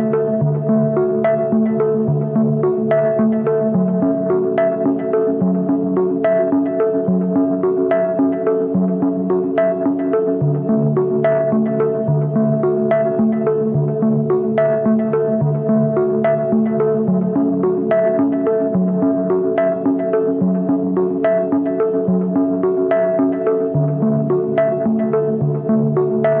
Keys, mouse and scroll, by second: 13.4 alt+click, 19.7 right click, 21.2-23.2 typing, 22.0 double click, 23.8 right click, 24.6 double click.